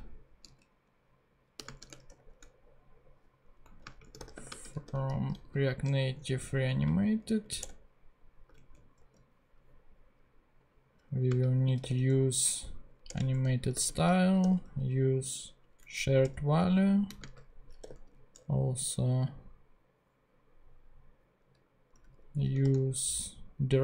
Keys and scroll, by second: 0.0-0.4 typing, 1.6 ,, 1.8 space, 2.1 shift+[, 3.6 Right, 3.8-5.9 typing, 6.6 Down, 7.6 Return, 8.4 super+Return, 8.5 super+Right, 9.0 super+;, 9.8 ;, 11.3-12.4 typing, 13.2 Return, 13.8-15.1 typing, 15.9 Down, 16.2 Return, 17.0-18.4 typing, 21.7-23.1 typing.